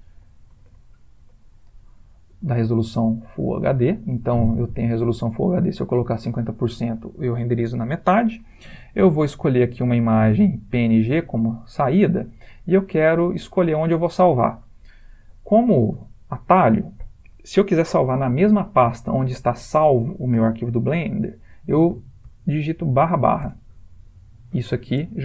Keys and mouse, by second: 14.2 click.